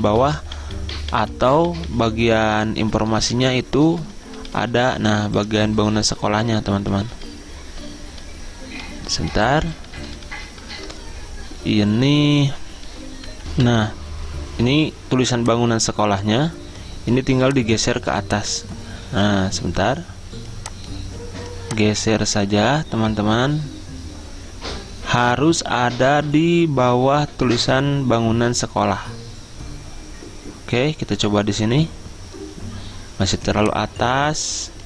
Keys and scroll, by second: 3.5 ctrl+shift+[, 4.3 ctrl+], 4.6 ctrl+], 4.9 ctrl+], 5.1 ctrl+], 6.7 ctrl+], 9.6 ctrl+], 10.2 ctrl+], 11.0 ctrl+], 13.6 F10, 13.8 F10.